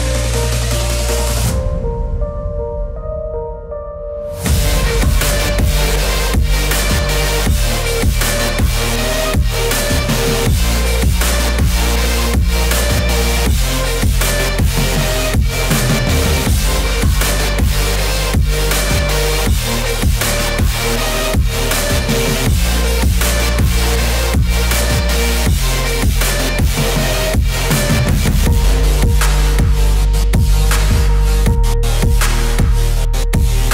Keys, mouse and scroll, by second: 0.0 click, 1.1 scroll down 1, 2.9 scroll up 1, 5.2-12.5 drag, 15.0 click, 15.7-17.2 scroll down 1, 17.8 space, 18.1-22.1 drag, 22.1 right click, 23.4-27.2 drag, 27.2 click, 27.7 scroll up 1, 29.8-33.7 drag.